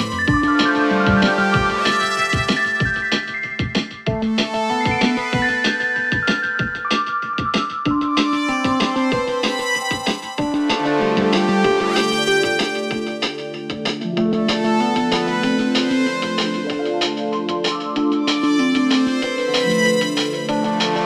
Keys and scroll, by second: 12.7 ctrl+z, 13.3 5, 13.4 Return.